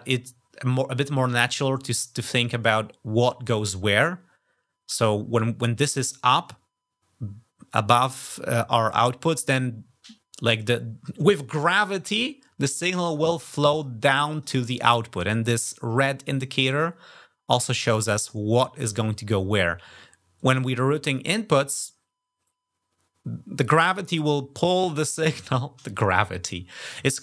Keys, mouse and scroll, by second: 13.6 click, 14.1 click, 20.2 click.